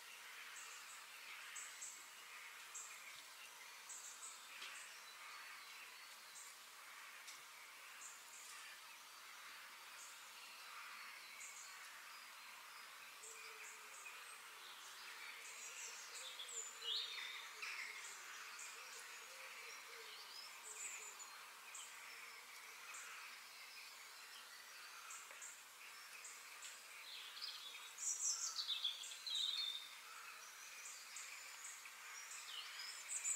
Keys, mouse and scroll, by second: 8.4-10.2 middle drag, 14.0-18.9 middle drag, 22.2 f, 24.7-25.7 middle drag, 25.7 KP_7, 26.2-26.9 scroll up 1, 26.9-28.8 shift+middle drag.